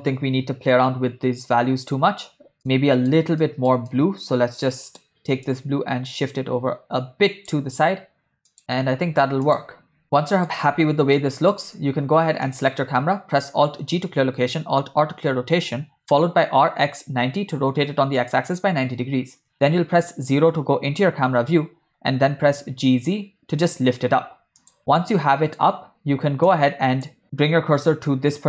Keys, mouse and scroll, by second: 0.1 space, 2.4 space, 2.7 ctrl+middle click, 3.5 middle click, 3.9-4.8 ctrl+middle drag, 5.0 click, 5.7-7.7 drag, 8.6 space, 9.0 space, 9.6 click, 10.0-10.4 ctrl+middle drag, 10.9 space, 11.2 middle click, 11.7 space, 12.6 click, 13.9 alt+g, 15.0 alt+r, 16.4 r, 19.5 KP_0, 22.0 g, 24.9 ctrl+middle click, 26.6 click.